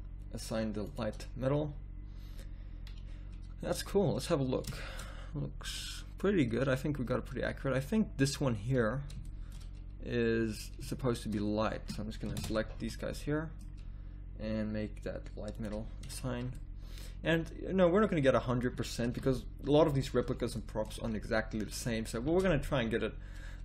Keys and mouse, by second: 0.9-3.2 drag, 3.2 middle click, 3.7 middle click, 3.9 z, 5.6 a, 9.2 middle click, 10.6 middle click, 11.0-12.3 right drag, 12.3 ctrl+KP_Add, 12.7 z, 16.2 a, 19.2 KP_1, 19.9 z, 22.4 shift+z.